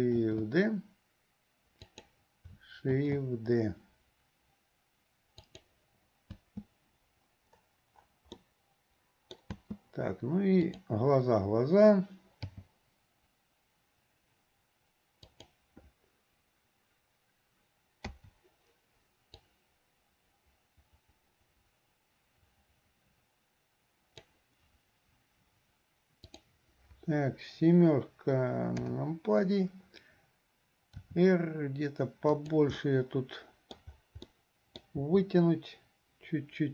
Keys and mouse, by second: 0.3 shift+d, 6.5 space, 8.5-9.6 drag, 8.5-9.6 right drag, 9.6 space, 10.7 click, 12.6 g, 18.3 i, 19.6-24.5 drag, 26.3 click, 28.8 KP_7, 31.0 r, 32.9-34.0 middle drag, 34.6 middle click, 35.1 r.